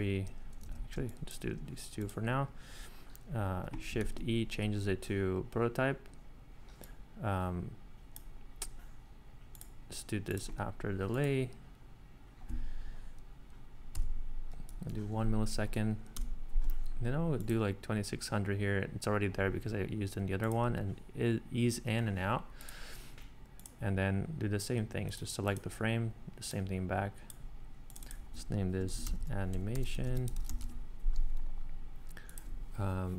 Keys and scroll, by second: 0.6 super+z, 1.0 space, 4.0 shift+e, 13.9 1, 15.1 `, 16.1 BackSpace, 29.0-31.0 typing.